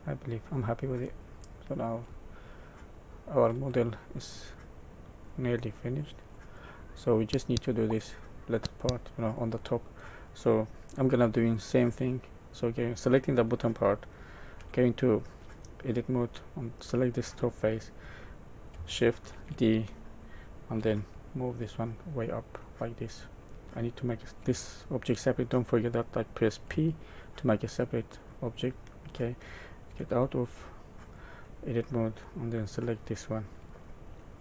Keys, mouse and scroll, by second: 2.5 shift+middle click, 2.5-3.5 scroll down 10, 4.1 middle click, 5.7 middle click, 6.5-7.0 scroll down 2, 7.0 middle click, 11.3 click, 12.2 click, 14.5 Tab, 16.6 click, 19.3 shift+d, 23.1 middle click, 23.6 Tab, 24.4 Tab, 26.6 p, 28.0 click, 29.9 Tab, 30.3 click, 31.0 click, 33.8 shift+middle click.